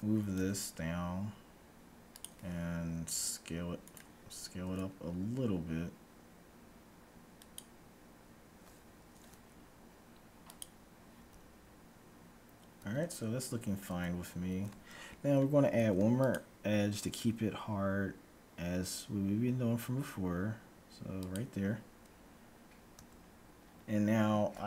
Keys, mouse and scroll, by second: 3.3 s, 4.8 s, 10.6-12.3 drag, 11.3 Tab, 12.8 Tab, 13.8 Tab, 14.6 Tab, 15.8 ctrl+r, 22.9 Tab, 23.6-24.6 middle drag.